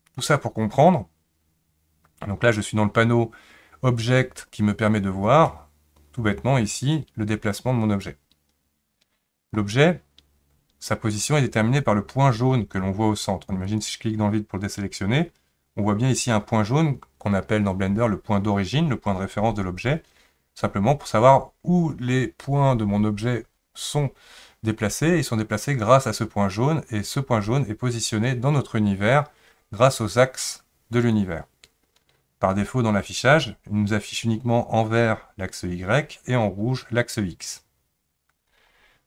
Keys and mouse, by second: 8.0-9.5 drag, 13.7 click.